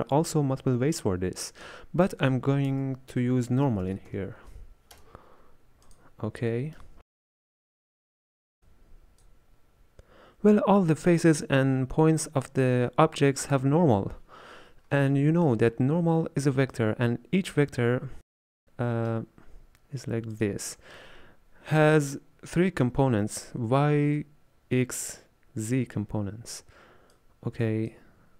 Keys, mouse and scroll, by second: 2.7 space, 6.5-8.7 middle drag, 8.7 click, 15.2-16.8 shift+middle drag, 16.8-18.6 drag, 18.6-20.4 middle drag, 20.4-28.3 drag.